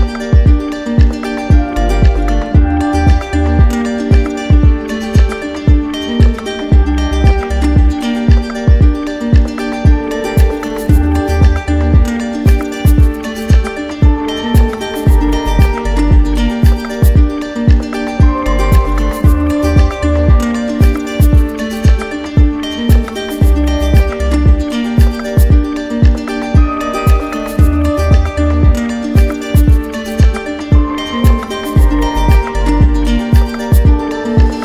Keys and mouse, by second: 2.4 ctrl+click, 3.3-4.3 ctrl+right drag, 6.0-7.1 drag, 13.0-14.1 drag, 14.3 click, 14.9 click, 16.0 ctrl+z, 17.5 ctrl+z, 18.9 shift+click, 19.3 ctrl+z, 21.3 ctrl+z, 21.7 ctrl+z, 24.5-25.6 drag, 30.7-31.7 drag, 34.2 shift+click.